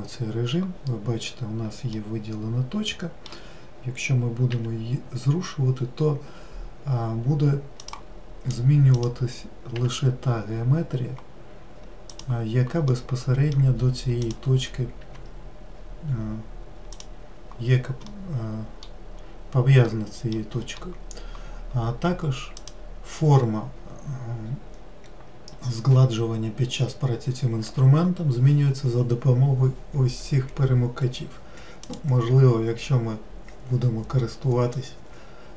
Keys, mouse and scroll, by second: 2.5-5.0 middle drag, 5.0 g, 9.5 click, 10.2 g, 13.4-14.7 middle drag, 14.7 click, 15.5 g, 18.6-19.7 middle drag, 19.7-20.4 scroll up 1, 20.4-23.1 middle drag, 23.1-26.2 drag.